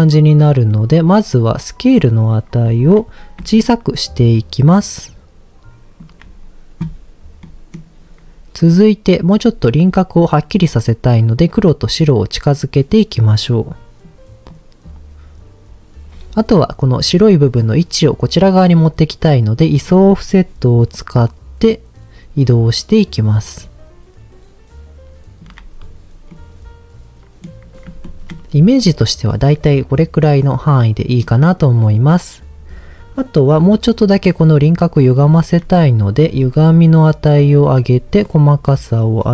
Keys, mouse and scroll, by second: 0.7 middle click, 1.0-1.8 scroll up 1, 1.8-2.1 scroll up 1, 3.6-6.0 shift+drag, 11.4-12.1 drag, 12.5 click, 13.5 click, 14.5 click, 20.6-25.4 shift+drag, 26.3-27.4 middle drag, 28.0 shift+middle drag, 29.6-30.3 middle drag, 30.8 middle click, 35.2 scroll up 2, 35.6 middle click, 36.4-37.4 shift+drag, 38.2-39.2 drag.